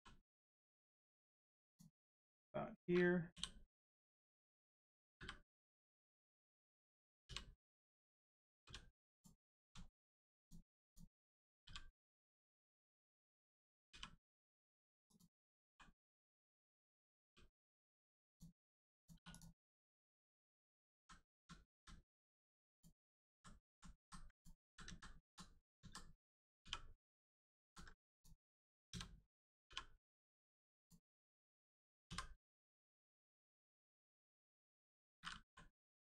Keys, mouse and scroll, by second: 1.7 click, 3.3 l, 3.9 click, 4.3-4.6 scroll down 1, 5.1 m, 5.5 click, 7.2 u, 7.5 scroll down 1, 8.6 g, 9.1 click, 9.4-9.7 scroll up 1, 9.8 shift+middle click, 10.4 click, 10.8 click, 12.1 right click, 12.5 scroll up 1, 13.9 r, 15.0 click, 15.6 g, 16.1 click, 17.1 g, 17.7 right click, 18.3 click, 20.9 ctrl+z, 22.3 click, 22.7 click, 23.3 ctrl+z, 23.6 ctrl+z, 24.3 click, 24.6 ctrl+z, 24.8 ctrl+z, 26.6 r, 27.2 right click, 27.6 ctrl+z, 28.1 click, 28.9 a, 30.2 right click, 30.7 click, 31.1-32.0 scroll down 1, 33.9 click, 35.4 l.